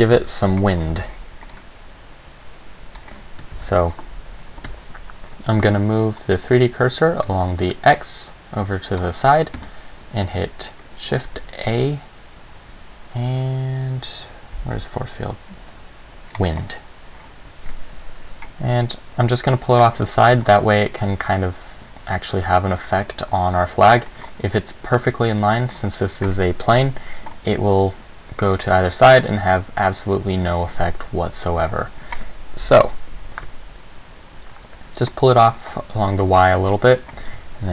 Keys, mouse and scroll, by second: 0.3 KP_7, 1.7 click, 3.7 shift+a, 4.8 n, 7.4 click, 9.7 shift+a, 18.8 g, 20.0 click, 20.2 middle click, 21.0 middle click, 22.9 middle click, 24.3 middle click, 25.7 middle click, 27.0 KP_7, 33.4 g, 35.2 click, 36.4 middle click, 37.4 r.